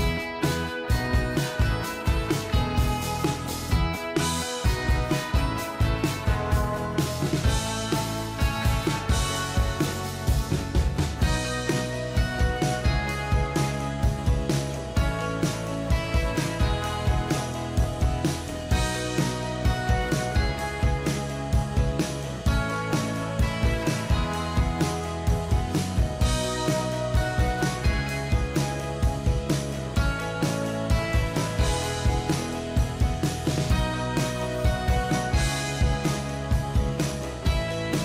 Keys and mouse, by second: 6.3 0, 6.7 Return, 8.7 ctrl+=, 9.3 ctrl+=, 11.3 ctrl+j, 16.6 shift+click, 18.0 ctrl+g, 18.2 ctrl+g, 19.5 ctrl+z, 21.0 double click, 24.6 right click, 26.8 ctrl+-, 27.2 ctrl+-, 29.1 ctrl+click, 31.3 ctrl+t, 32.1 shift+click, 36.5 ctrl+j.